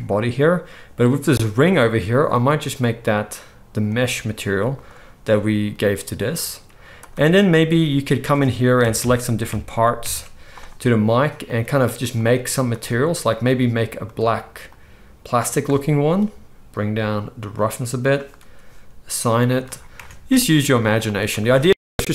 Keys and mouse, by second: 2.2-7.0 drag, 7.1 Tab, 7.6 click, 8.3 ctrl+middle click, 8.3 ctrl+right click, 8.7-11.3 ctrl+drag, 11.3-14.0 middle drag, 14.0-17.5 drag, 17.5-22.1 middle drag, 19.9 Tab, 20.6 z.